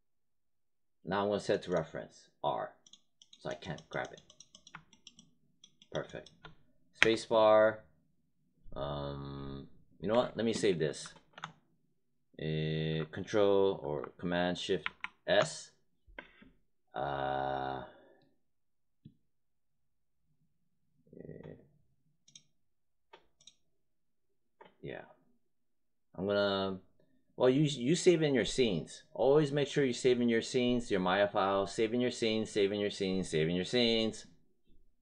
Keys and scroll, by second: 6.9 space, 14.6 ctrl+shift+s.